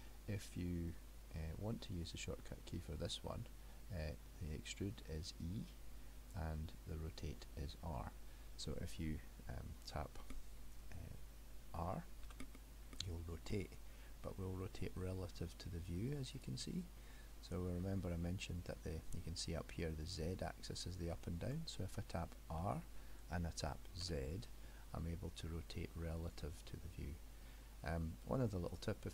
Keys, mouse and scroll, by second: 12.3 r, 17.0 middle click, 17.8 middle click, 22.6 r.